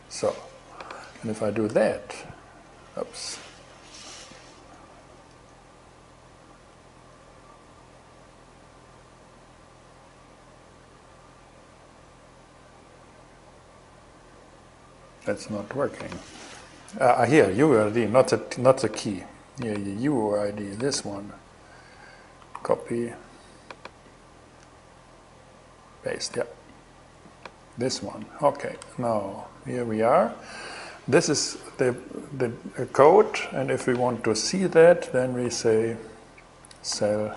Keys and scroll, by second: 2.3 shift+Return, 22.1 alt+super+c, 22.9 super+c, 27.5 super+v, 28.3 shift+super+v, 28.4 shift+super+Return, 35.0 shift+c, 36.2-37.3 typing.